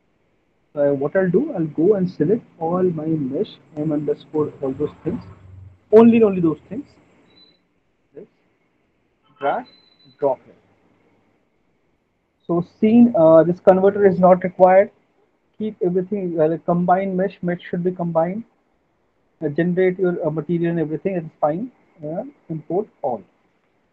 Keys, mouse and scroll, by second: 0.9 click, 2.1 click, 3.8 middle click, 5.0 ctrl+click, 6.2 middle click, 9.6 click, 10.1 click, 11.6 click, 15.0 middle click, 15.5 middle click, 16.7 middle click, 18.0 middle click, 18.2 middle click, 20.8 middle click, 22.7 click.